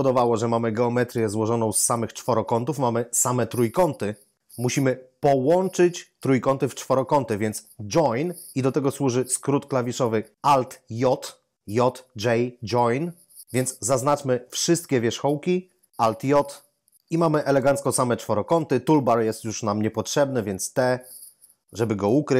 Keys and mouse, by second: 14.2 a, 14.6 a, 16.2 alt+j, 20.8 t.